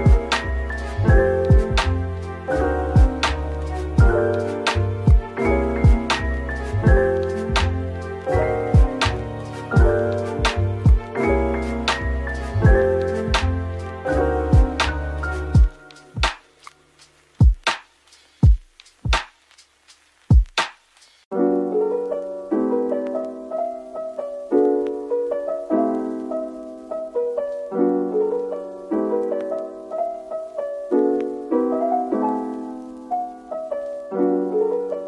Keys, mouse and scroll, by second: 1.4 ctrl+b, 4.4-4.7 scroll, 4.7 middle click, 6.8 right click, 7.9 middle click, 9.0 typing, 9.5-9.9 scroll down 1, 9.9 scroll up 1, 11.0-12.0 typing, 13.7 middle click, 14.8-15.6 typing, 17.0 typing, 18.2 scroll up 1, 19.2 typing, 21.7 scroll down 1, 22.8 typing, 24.0 scroll up 1, 24.7-26.8 typing, 30.4 typing, 32.7-33.5 typing.